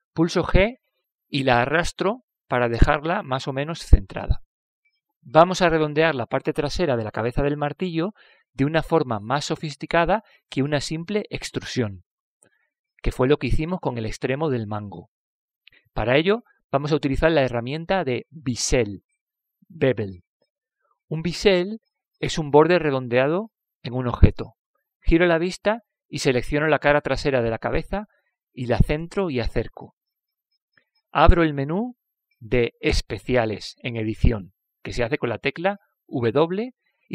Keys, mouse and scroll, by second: 0.2 KP_5, 2.1 g, 14.2-16.0 middle drag, 16.8-18.9 middle drag, 26.4-28.1 middle drag, 29.9-31.6 right drag, 31.1-33.7 middle drag.